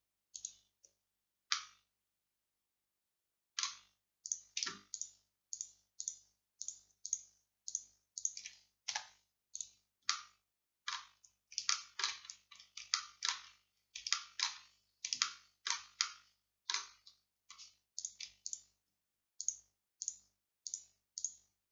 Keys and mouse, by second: 1.6 click, 2.1 middle click, 9.0 x, 12.6 middle click, 13.6 middle click, 13.9 middle click, 14.9 middle click, 16.6 middle click, 18.0-19.4 right drag.